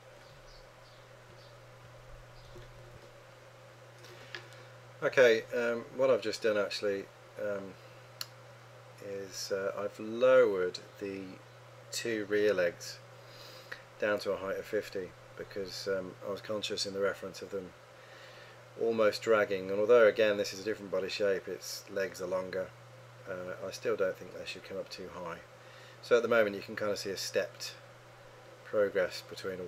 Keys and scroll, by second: 3.0 Return.